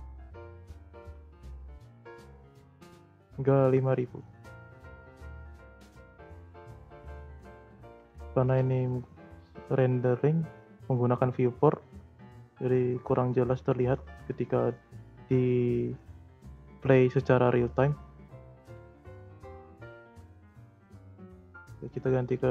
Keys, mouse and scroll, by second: 1.2 0, 3.6-4.9 drag, 5.3 space, 6.3 space, 6.6-7.0 scroll down 2, 7.0-7.5 shift+middle drag, 7.5-8.1 scroll down 1, 8.1-8.6 shift+middle drag, 8.6-10.0 scroll up 1, 10.0-13.0 drag, 16.9-18.6 drag, 18.6 space, 19.7 space, 20.2-21.6 drag, 22.2-22.5 drag.